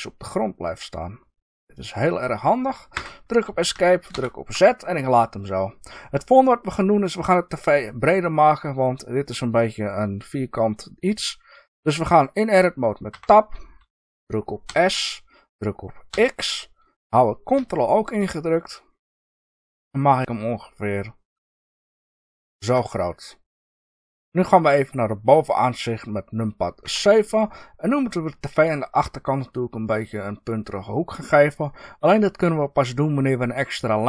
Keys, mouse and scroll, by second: 2.9 Escape, 4.0 ctrl+z, 13.0 Tab, 14.6 s, 22.6 ctrl+click, 24.0-26.8 middle drag, 26.8 KP_7, 30.9-34.0 middle drag.